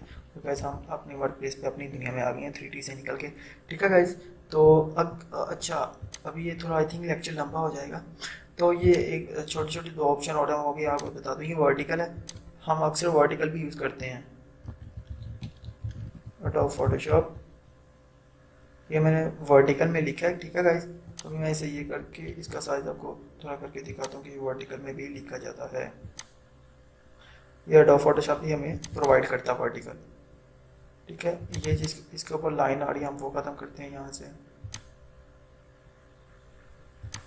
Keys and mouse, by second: 0.7 ctrl+0, 6.2-8.9 drag, 9.7 right click, 11.0 click, 14.5-17.8 typing, 21.2 click, 22.4 ctrl+t, 23.9-28.8 drag, 31.5 click, 34.7 click, 37.1 click.